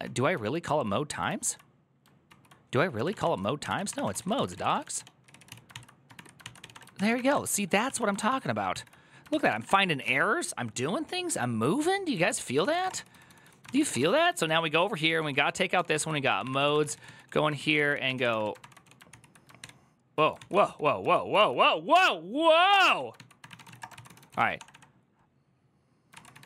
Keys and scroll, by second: 0.1 ctrl+j, 0.9 ctrl+k, 1.1 ctrl+j, 2.8 ctrl+w, 2.9 ctrl+o, 3.0 ctrl+c, 3.2-7.4 typing, 7.6 ctrl+o, 8.1 ctrl+o, 9.3 ctrl+c, 9.3 typing, 9.4 Return, 12.1 alt+{, 12.3-20.8 typing, 19.4 ctrl+h, 20.2 ctrl+o, 20.2 ctrl+c, 21.1 ctrl+c, 22.1-26.4 typing.